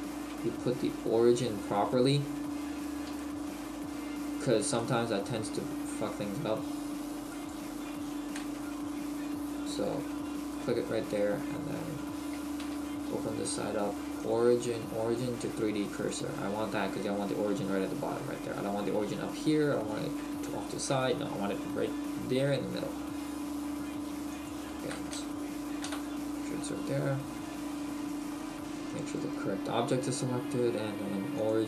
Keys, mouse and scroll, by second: 0.9-1.2 shift+scroll up 1, 2.5-3.0 scroll down 1, 3.0 scroll down 3, 3.2 shift+middle click, 3.9-4.7 scroll up 4, 4.7 shift+middle click, 4.7-5.2 scroll up 3, 5.4-6.1 scroll up 1, 7.3 click, 8.7 KP_3, 9.7 KP_1, 12.6 t, 13.3-14.2 scroll up 1, 14.2 click, 14.2-15.2 scroll up 2, 24.3 click, 25.1 KP_3, 25.9 KP_1, 28.1 right click, 31.4 click.